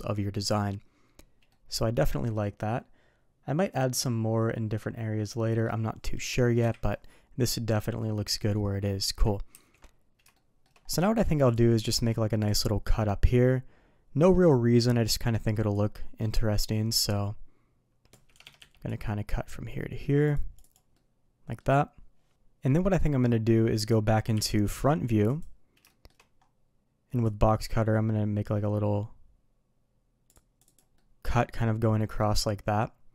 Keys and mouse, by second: 1.4-5.6 middle drag, 6.5 KP_3, 9.5 ctrl+s, 10.3-10.6 shift+middle drag, 15.8-18.3 drag, 18.8-20.7 drag, 20.9-21.5 middle drag, 22.6-23.7 middle drag, 25.8 shift+middle drag, 27.2-30.7 drag, 30.9-31.3 middle drag, 31.7-32.1 middle drag, 32.6-33.1 middle drag.